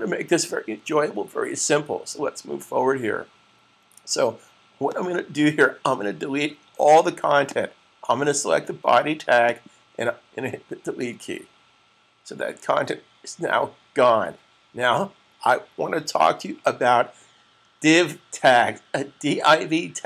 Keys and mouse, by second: 4.8 click, 7.4 click.